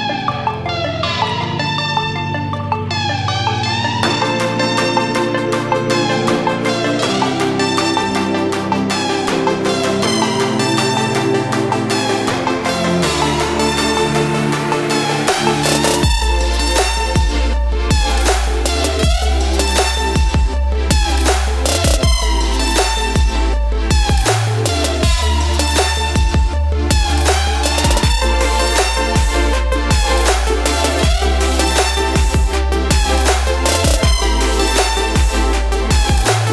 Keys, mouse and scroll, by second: 1.1 scroll down 1, 3.1 click, 5.8 click, 6.9 space, 7.0 click, 7.3 space, 10.9 space, 11.2 ctrl+click, 11.4 ctrl+space, 11.7 click, 12.0 space, 12.3 space, 14.7 right click, 15.3 click, 18.1 click, 19.1 ctrl+z, 19.6 ctrl+click, 21.8-29.4 drag, 29.5 v, 30.0 click, 31.1 right click, 32.0 click, 34.6 ctrl+z, 35.6-36.4 scroll down 1, 36.4 click.